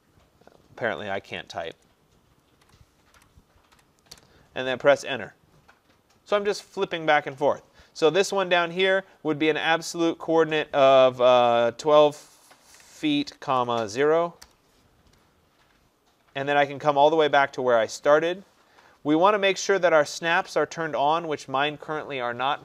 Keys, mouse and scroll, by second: 1.3-3.8 typing, 4.2 Return, 12.7-13.9 typing, 14.5 Return.